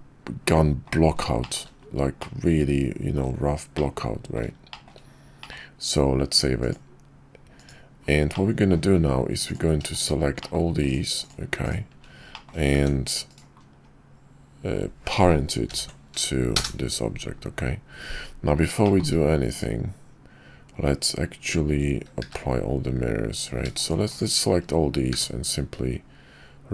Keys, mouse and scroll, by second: 1.4 shift+middle drag, 2.2-3.2 middle drag, 3.7-4.3 middle drag, 4.7 shift+middle drag, 5.4 middle click, 8.3-8.7 middle drag, 10.4 shift+middle click, 12.3 click, 12.7 g, 15.7 ctrl+p, 18.8 shift+click, 22.2 q, 25.1 q.